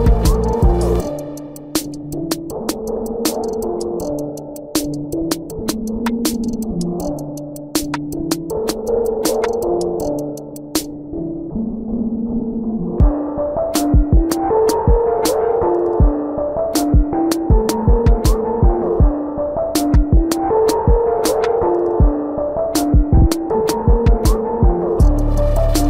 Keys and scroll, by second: 3.3 space, 8.1 space, 8.6 ], 10.9 space, 14.7 space, 15.4 space, 19.8 space, 21.6 ctrl+alt+z, 24.4 space.